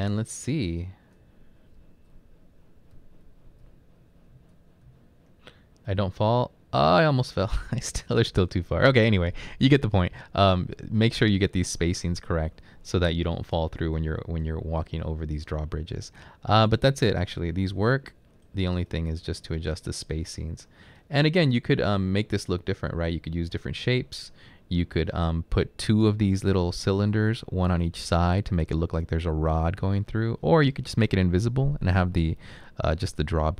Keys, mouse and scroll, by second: 0.0 Right, 1.2 Right, 1.7 typing, 2.9-5.0 typing, 5.4 Up, 6.0 Up, 13.6-14.4 typing, 17.5-18.1 typing, 24.5-25.3 typing, 30.7 typing.